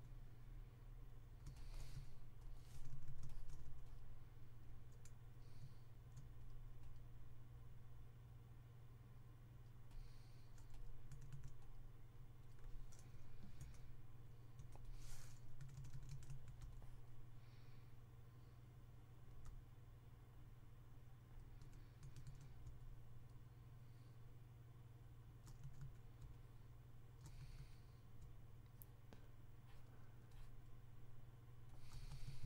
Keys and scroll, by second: 1.7-3.5 typing, 11.0 typing, 12.9-14.5 typing, 15.5-16.2 typing, 21.5-22.1 typing, 25.4-26.2 typing, 27.6 typing, 31.8 typing.